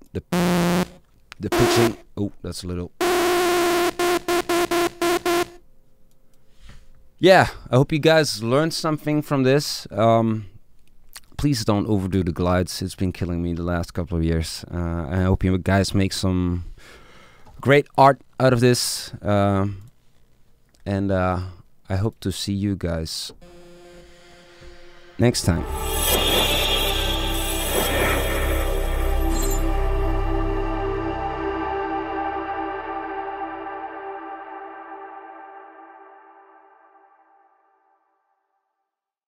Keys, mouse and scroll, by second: 5.8 middle click, 19.9 click, 20.2 click, 20.8 click.